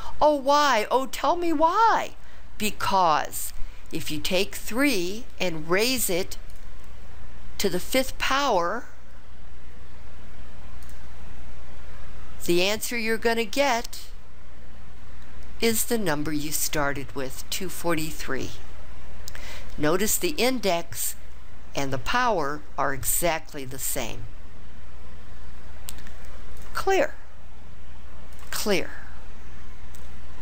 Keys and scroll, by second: 4.7 3, 6.5 ^, 7.8 5, 10.8 ), 13.9 Return.